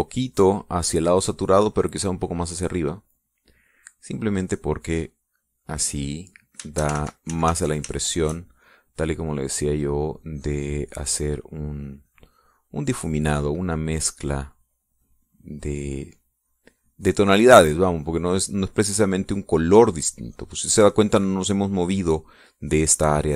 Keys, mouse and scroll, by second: 0.2-3.4 drag, 3.8 middle click, 5.1-7.6 drag, 7.9 ctrl+shift+z, 9.0 ctrl+shift+click, 9.6-12.4 shift+drag, 12.6-14.3 drag, 14.6 click, 16.1-19.7 drag.